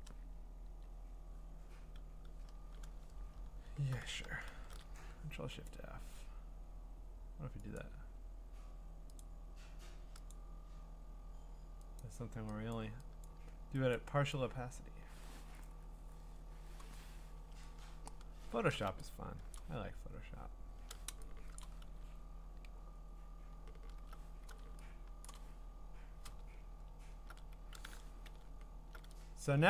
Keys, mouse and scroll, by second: 0.6 0, 2.5 Return, 3.3-4.5 scroll, 4.5 ctrl+shift+f, 5.7 click, 7.8 click, 9.2 click, 12.7 click, 13.2 click, 13.9 click, 14.3 click, 17.3 Return, 17.9-18.7 scroll, 19.1 scroll up 8, 19.5 scroll, 19.5 click, 20.0 scroll up 1, 20.2 scroll down 3, 21.6 click, 22.3-23.3 scroll, 25.3 click, 25.3 scroll, 26.5-27.5 scroll, 28.4-28.8 ctrl+scroll.